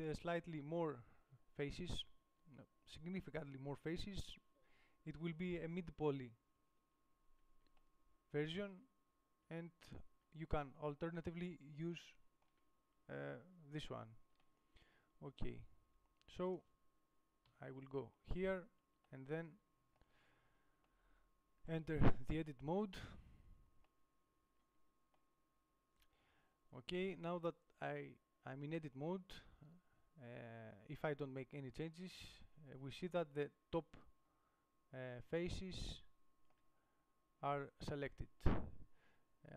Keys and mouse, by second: 10.3-12.5 middle drag, 14.8 middle click, 16.8-17.8 middle drag, 17.8 KP_7, 22.4 Tab, 36.4-39.5 middle drag.